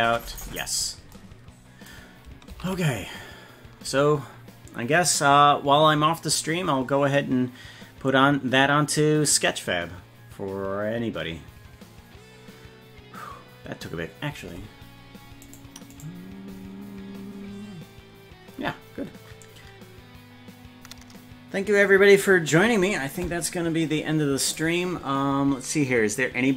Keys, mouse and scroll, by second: 0.6-1.0 scroll down 8, 2.9 ctrl+s, 15.5 right click, 16.0 right click, 17.4-17.8 scroll up 3.